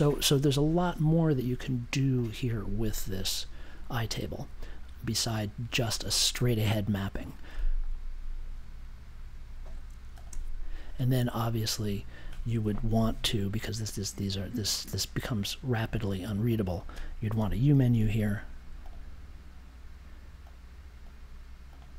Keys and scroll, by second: 17.1-18.4 typing.